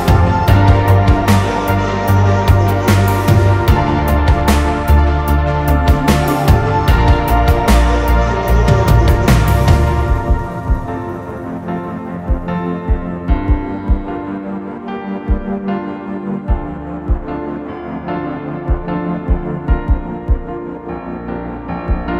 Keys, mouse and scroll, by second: 0.2 scroll down 1, 0.4 middle click, 0.7 scroll up 1, 1.3 double click, 2.4 m, 4.4 scroll down 1, 5.1 m, 5.2 scroll up 1, 5.5 scroll down 1, 5.7 middle click, 6.0-6.3 scroll up 1, 6.3-6.7 scroll down 1, 6.7 right click, 8.2 shift+click, 8.7 shift+click, 9.2 shift+click, 9.7 shift+click, 10.3 right click, 11.6 right click, 12.5 middle click, 13.4 ctrl+z, 14.0 middle click, 14.8 right click, 17.0 middle click, 17.7 right click, 18.6 middle click, 20.2 middle click, 20.2 scroll up 1, 20.9 scroll down 1, 21.3 double click, 21.6 scroll up 1, 21.8 middle click.